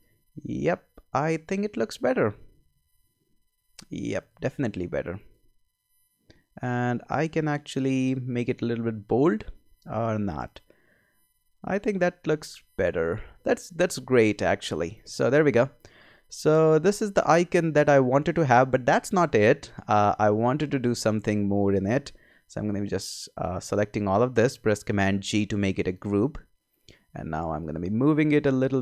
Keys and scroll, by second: 25.1 super+g.